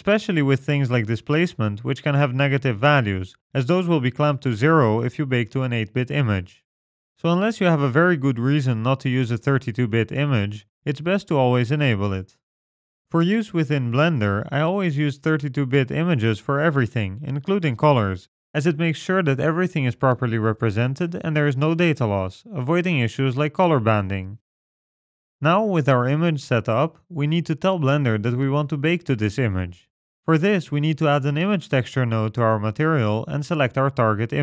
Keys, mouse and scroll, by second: 25.6-26.5 scroll down 5, 26.5-27.4 scroll down 1, 28.9 middle click, 29.4-30.3 scroll up 10, 30.3 shift+a, 33.8-34.4 scroll up 10.